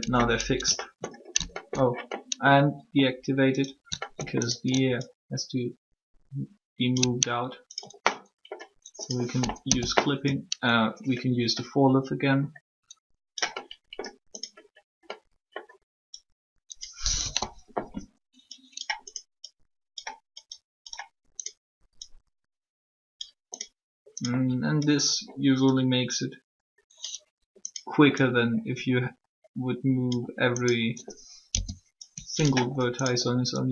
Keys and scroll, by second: 9.6 o, 17.1 1, 31.5 o.